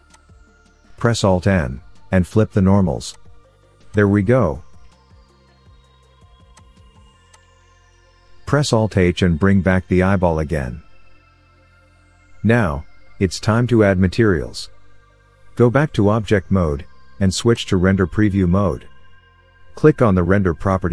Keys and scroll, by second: 2.1 alt+n, 9.3 alt+h, 15.7 Tab.